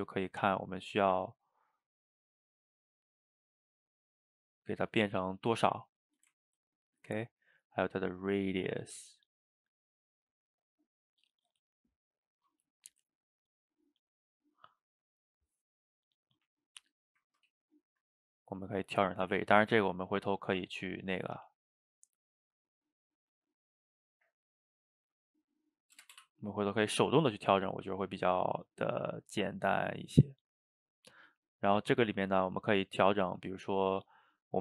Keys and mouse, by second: 5.7-7.6 middle drag, 7.6-10.6 drag, 11.0-12.9 middle drag, 12.9-16.8 drag, 16.8-18.6 middle drag, 18.6-28.0 drag, 29.8 click, 31.3 click, 32.3 click, 33.7 click.